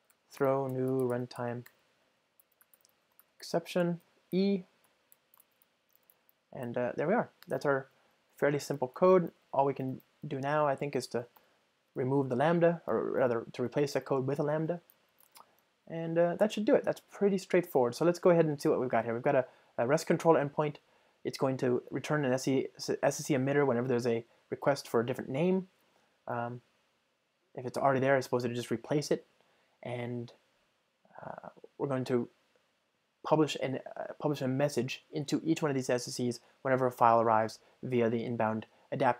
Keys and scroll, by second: 11.4 alt+Return, 13.6 super+BackSpace.